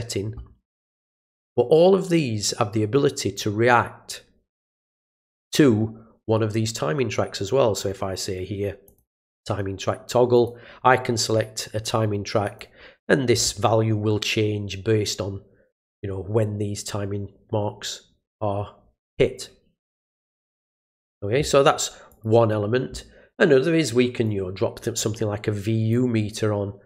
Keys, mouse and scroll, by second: 1.1 click, 8.8 click, 10.3 click, 12.4 click, 20.6 click, 22.1 click, 24.2-25.9 drag.